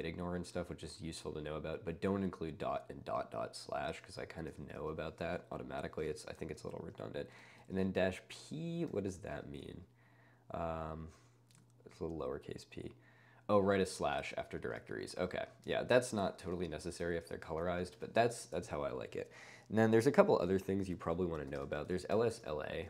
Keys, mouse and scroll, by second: 0.8 click, 4.6 ctrl+space, 4.8-10.1 typing, 7.5 ctrl+space, 11.9 n, 13.9 ctrl+space, 14.2 1, 14.7 ctrl+space, 15.5 ctrl+space, 16.0 Escape, 16.4 ctrl+space, 17.2-18.4 typing, 21.3-22.8 typing.